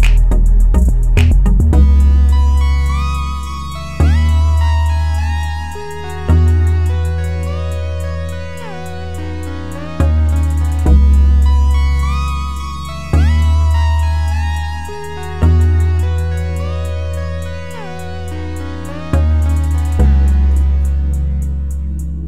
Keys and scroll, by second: 16.1-17.0 typing, 17.0 Return.